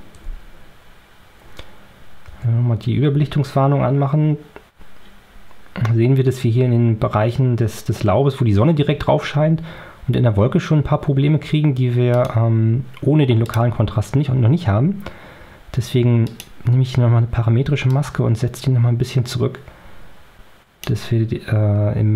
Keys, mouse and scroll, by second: 2.2 o, 12.0 click, 13.3 click, 16.2 click, 17.8-20.9 drag.